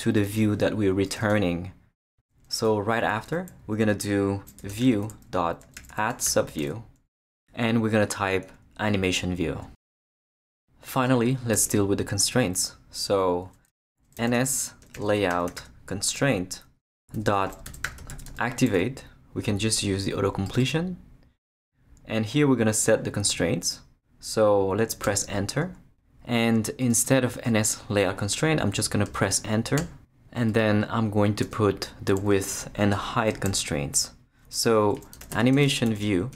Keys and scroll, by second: 4.3-6.7 typing, 8.5-10.4 typing, 11.5 Return, 13.9-16.1 typing, 16.1 Return, 17.3-18.8 typing, 25.0 Return, 29.1 Return, 31.4 Tab, 34.7-36.3 typing.